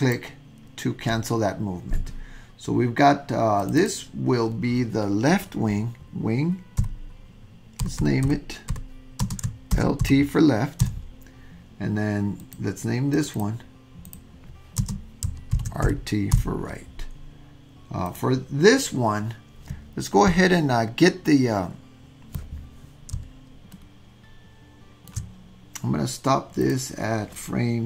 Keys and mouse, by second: 3.6 click, 3.8-11.6 drag, 8.0 BackSpace, 12.4 click, 13.2 click, 18.0 click, 23.7-25.1 shift+middle drag, 26.7-27.8 drag.